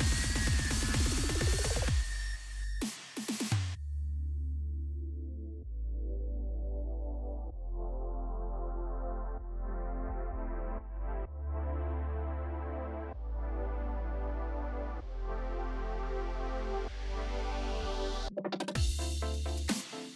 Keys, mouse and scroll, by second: 5.0 ctrl+d, 5.5 alt+scroll down 1, 9.8 alt+scroll down 1, 9.9 alt+scroll up 1, 10.8 alt+scroll up 1, 11.6 alt+scroll down 1, 15.1 b, 16.2 click, 17.8 ctrl+shift+n, 18.4 shift+Return.